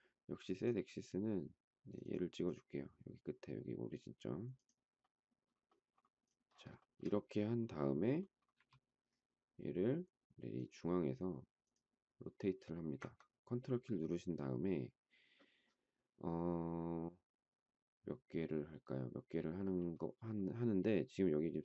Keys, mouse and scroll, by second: 6.8 shift+middle click, 8.5 q.